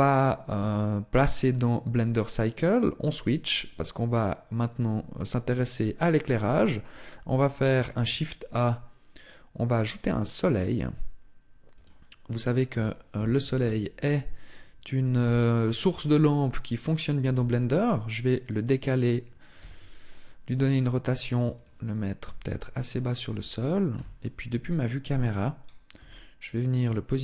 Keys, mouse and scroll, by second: 1.3 click, 7.5 shift+a, 12.9 KP_3, 16.3 click, 16.3 g, 17.1 g, 18.5 click, 19.4 r, 22.0 click, 22.0 g, 22.9 click, 23.7 KP_0, 25.7 g.